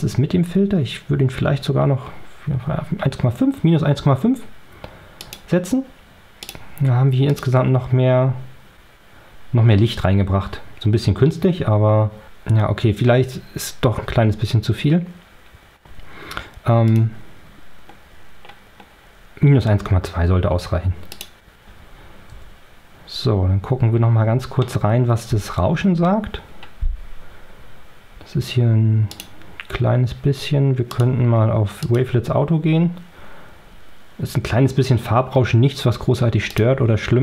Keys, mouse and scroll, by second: 1.2-1.8 scroll down 2, 5.1 click, 6.3 click, 7.2 click, 16.7 click, 18.1 scroll up 2, 18.9 scroll up 2, 21.1 click, 22.2 o, 23.2 o, 29.0 click, 30.8 click, 31.7 click, 36.4 click.